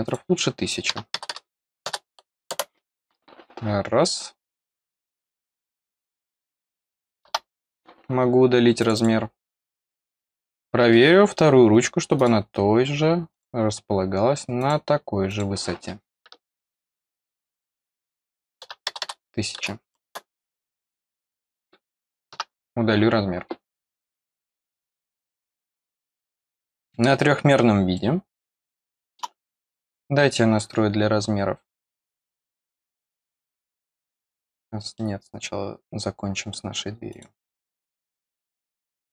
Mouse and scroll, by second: 0.0 click, 5.2 click, 5.7 click, 6.2 click, 8.7 click, 8.9 click, 10.1 middle click, 10.3 middle click, 10.8 middle click, 12.1 click, 13.2 click, 14.5 click, 15.2 click, 16.6 click, 17.7 click, 20.7 click, 21.3 click, 25.1 click, 25.5 click, 26.4 middle click, 26.6-27.9 scroll down 1, 27.9-29.1 middle drag, 29.5 click, 33.1 click, 33.8 middle click, 34.9 middle click, 37.0 click, 37.6 click.